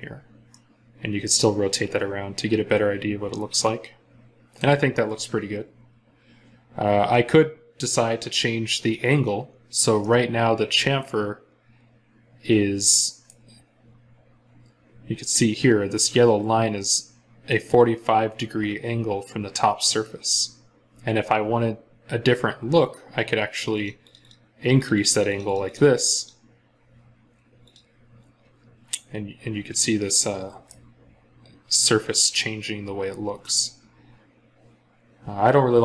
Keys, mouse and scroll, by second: 0.3 middle click, 13.7-14.9 scroll down 1, 23.9 double click, 29.1 scroll up 1, 30.0 middle click, 32.5 scroll up 1, 32.8-34.2 scroll down 1.